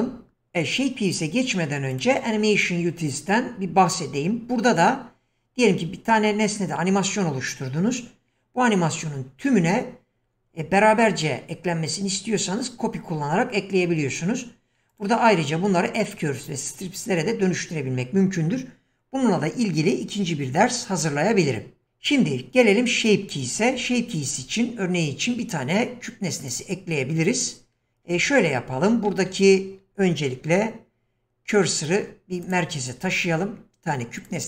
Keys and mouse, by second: 2.0 click, 14.9-20.2 drag, 24.2 shift+a, 28.2 ctrl+z, 28.9 shift+a, 30.3 shift+s, 33.1 shift+a.